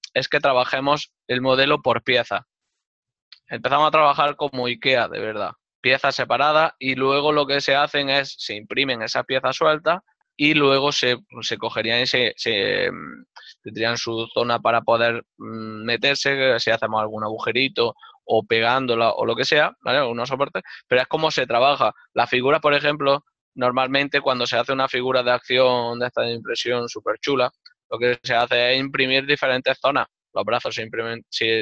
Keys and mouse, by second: 23.5 ctrl+middle click, 25.8 click.